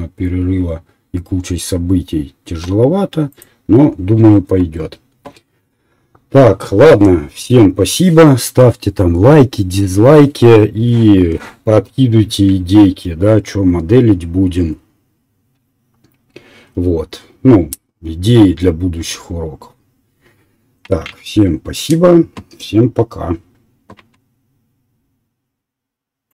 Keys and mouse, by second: 2.3-3.6 middle drag.